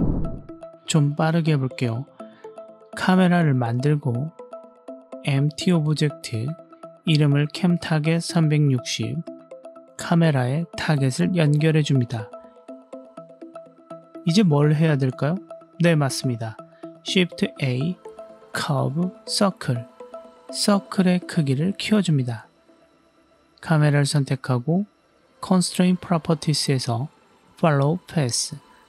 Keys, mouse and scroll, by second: 0.5 ctrl+alt+q, 1.0 middle click, 1.5-2.0 scroll down 1, 2.0-2.6 scroll down 1, 2.6 shift+a, 4.3 click, 4.9 click, 5.0 shift+a, 6.9-9.3 drag, 9.5 click, 9.7 click, 9.7 BackSpace, 10.9-14.5 drag, 14.7 g, 15.5-16.6 drag, 17.0 shift+a, 20.7 s, 21.4 drag, 21.6 middle click, 22.5-23.5 drag, 24.9-28.8 drag.